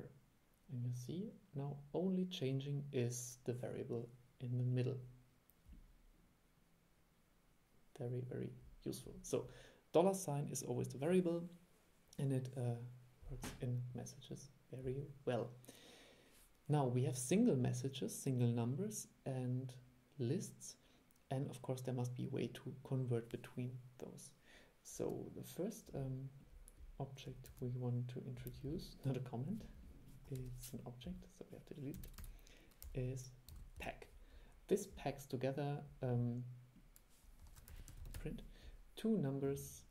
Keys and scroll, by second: 27.6 super+5, 32.3 super+1, 37.5 super+1.